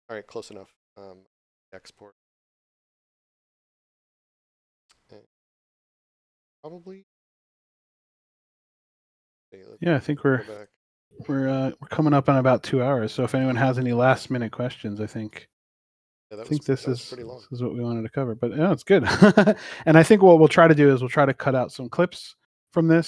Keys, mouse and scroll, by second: 0.7 Tab, 2.6 click, 7.6 click, 21.8 right click, 22.8 click.